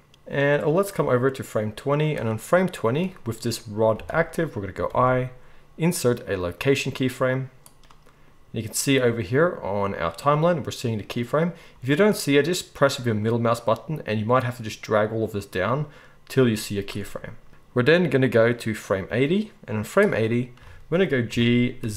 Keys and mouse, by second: 4.0 g, 4.9 i, 21.3 g.